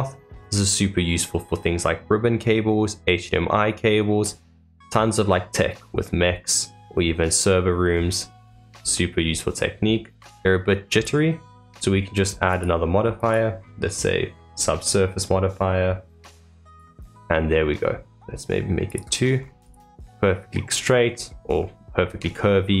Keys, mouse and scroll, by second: 0.3-0.8 scroll down 2, 0.8-3.9 middle drag, 4.2-5.4 scroll down 2, 5.4-8.4 middle drag, 8.4-8.9 scroll up 3, 8.9-10.8 middle drag, 10.8 click, 12.4 click, 13.1-16.2 drag, 18.8-19.3 drag, 19.3 scroll up 2, 19.6 click, 20.1-21.1 middle drag, 21.1-21.5 scroll down 3, 21.5-22.8 middle drag.